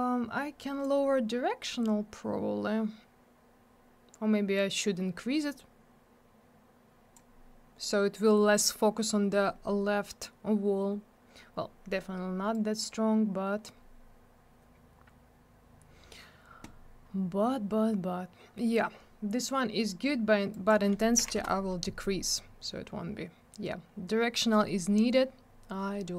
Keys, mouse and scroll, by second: 0.8 click, 12.5 click, 20.5 click, 20.7 click, 21.2 5, 21.3 Return.